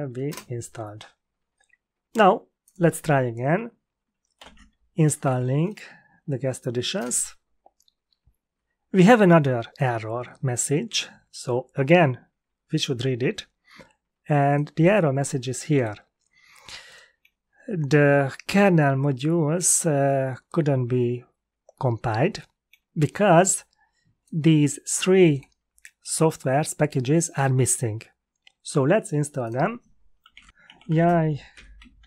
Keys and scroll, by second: 0.2 Return, 4.3 ctrl+l, 5.2 Up, 6.9 Return, 30.0-32.0 typing.